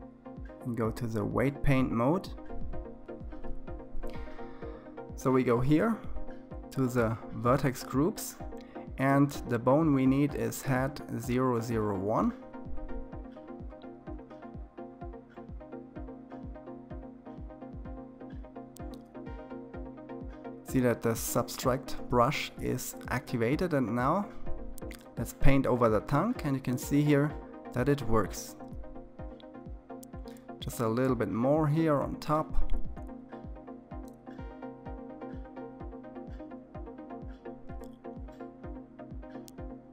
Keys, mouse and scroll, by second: 0.4-1.5 drag, 8.7 click, 11.4-12.5 middle drag, 12.5-14.0 scroll down 3, 14.0-17.0 middle drag, 17.0 KP_3, 18.3-19.6 scroll up 2, 22.3-25.0 drag, 28.0-29.6 middle drag, 29.6-30.5 scroll down 3, 30.5-33.5 drag, 35.2 KP_3, 39.6-39.9 drag.